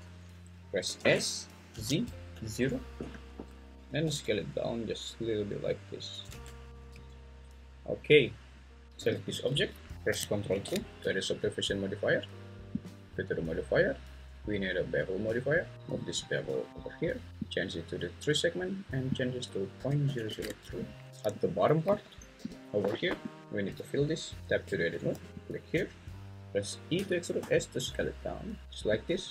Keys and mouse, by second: 1.0 s, 1.7 z, 2.3 0, 3.0 Return, 3.7 Escape, 4.1 s, 6.0 click, 6.3 Tab, 6.9 `, 8.8 ctrl+z, 9.0 g, 9.5 Escape, 10.5 ctrl+2, 14.1-15.7 drag, 15.9-16.7 drag, 17.5 click, 19.3-20.4 drag, 20.2 0, 21.9 `, 22.4 g, 22.9 Escape, 24.4 Tab, 26.9 e, 27.4 s.